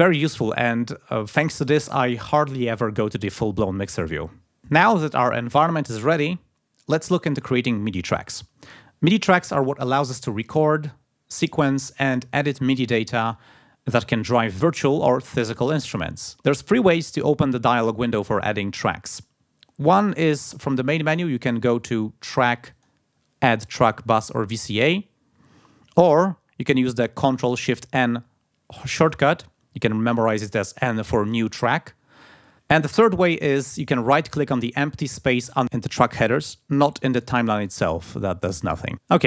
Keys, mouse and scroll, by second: 22.7 click, 32.6-33.5 scroll down 2, 35.9 right click, 37.2 right click.